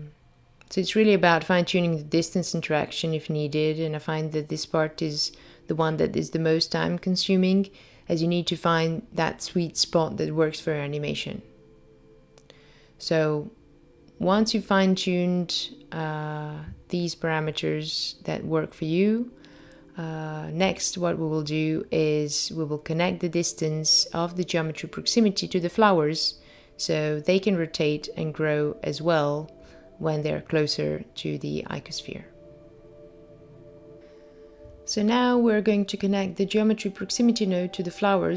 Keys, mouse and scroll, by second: 1.5 click, 5.4 click, 10.0 click, 16.1 click, 17.0 g, 22.0 click, 24.9 click, 27.9 0, 28.0 0, 30.1 click, 34.0 click, 34.9 middle click, 36.2-37.0 scroll down 5, 37.0 middle click.